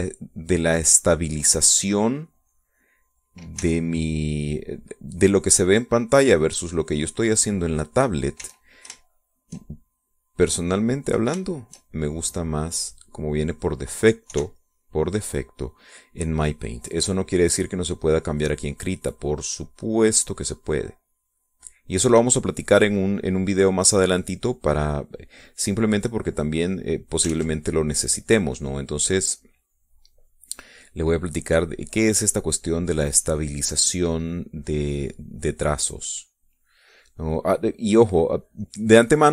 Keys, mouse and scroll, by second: 1.8 middle click, 4.0 click, 4.4 e, 4.6-5.6 drag, 6.5-8.3 drag, 8.6 middle click, 9.2 e, 9.8 shift+click, 10.6-12.0 shift+drag, 12.2 shift+click, 13.1-14.3 drag, 14.5 middle click, 15.1 KP_5, 15.4 middle click, 17.5-20.2 drag, 20.2-22.7 drag, 23.0-27.7 drag, 28.1 ctrl+z, 28.6-33.3 ctrl+drag, 33.9-37.7 drag, 37.8 click, 38.7 click.